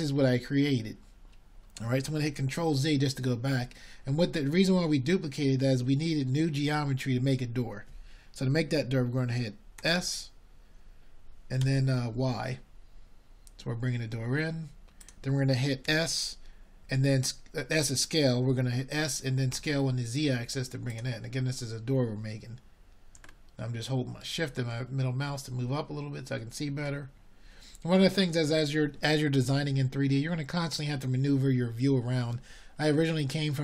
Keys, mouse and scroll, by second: 1.7 middle click, 3.9-5.1 middle drag, 5.1-10.3 drag, 10.3 ctrl+z, 18.0 s, 24.1 s, 29.8-33.6 middle drag.